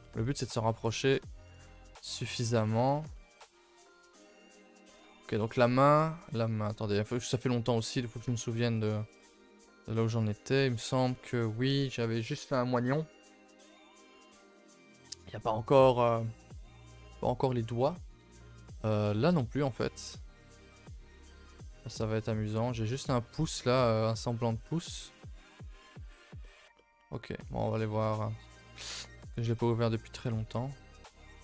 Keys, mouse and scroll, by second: 0.0-0.4 scroll up 1, 0.7-13.6 scroll up 2, 13.6-16.4 scroll up 1, 16.4-18.2 scroll up 1, 18.2-18.9 scroll up 1, 18.9-19.4 scroll up 1, 19.4-22.0 scroll up 1, 22.0-31.4 scroll up 1.